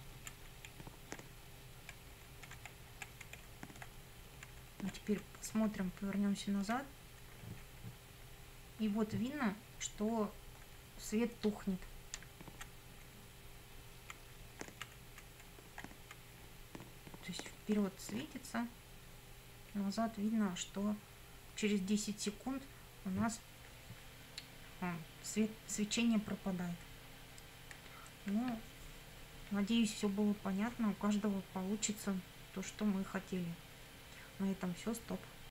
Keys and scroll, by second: 0.7 Up, 1.6 Right, 2.3 Up, 2.5 Right, 3.4 Up, 4.0 Left, 4.6 Up, 5.0 Left, 12.2 Down, 13.2 Left, 14.4 Up, 14.7 Left, 15.5 Up, 15.9 Left, 16.3 Up, 18.4 Left.